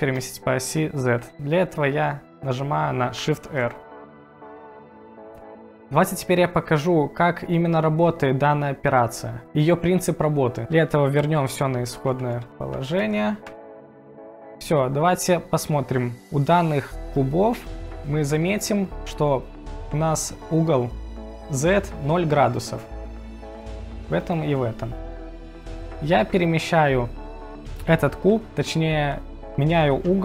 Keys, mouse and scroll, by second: 0.1 click, 3.4 shift+r, 4.3 click, 11.4 ctrl+z, 11.7 ctrl+z, 12.1 ctrl+z, 12.2 ctrl+z, 12.5 ctrl+z, 13.0 ctrl+z, 13.1 ctrl+z, 13.5 ctrl+z, 17.1 click, 17.6 click, 22.5 click.